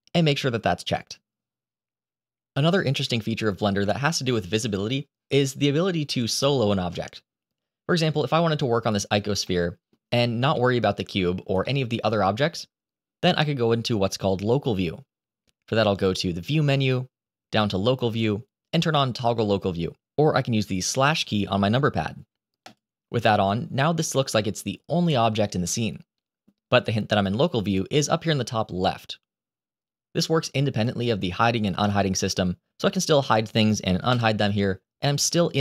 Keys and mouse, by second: 1.8 click, 8.7 click, 9.3-9.8 shift+middle drag, 10.4-11.2 middle drag, 11.5-11.9 shift+middle drag, 15.9-22.6 drag, 23.9-26.3 middle drag, 31.7-32.3 middle drag, 33.0 h, 34.0 alt+h.